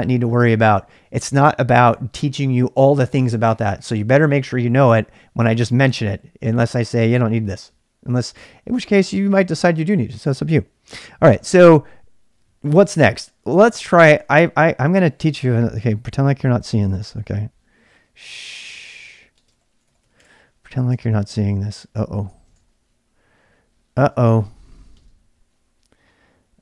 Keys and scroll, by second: 14.2 ctrl+[, 14.3-17.1 typing, 18.4-25.1 typing.